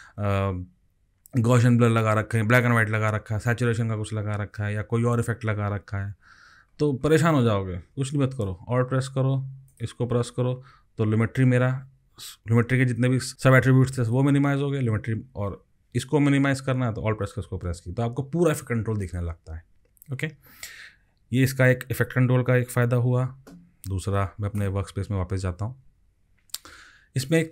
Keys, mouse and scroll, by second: 4.5 scroll down 14, 5.7-6.5 scroll down 11, 6.7-8.5 scroll up 16, 9.7 alt+click, 11.1-12.5 scroll up 7, 12.5 scroll up 2, 17.2 alt+click.